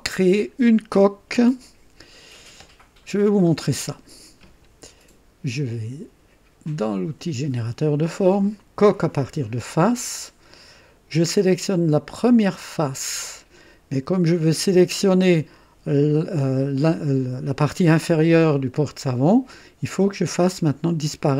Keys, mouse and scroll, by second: 3.4-4.2 right drag, 6.6 click, 8.8 click, 12.6 click.